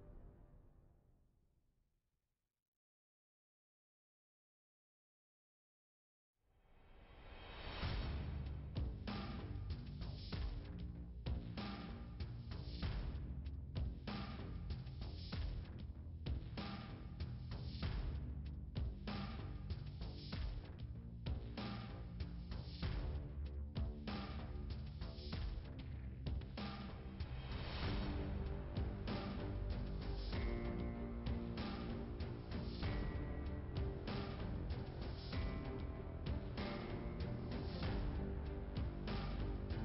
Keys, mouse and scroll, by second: 0.1 Return, 1.7 click, 5.2 0, 5.8 ,, 5.8 BackSpace, 7.3-10.5 typing, 11.5-13.2 typing, 14.5 BackSpace, 17.1-20.5 typing, 21.1 Return, 23.2 click, 24.6 0, 25.0 Return, 27.2 click, 28.8 click, 30.2 2, 30.3 Return, 32.7 click, 34.0 5, 35.4 Return, 37.8 click, 38.7 0, 38.8 Return.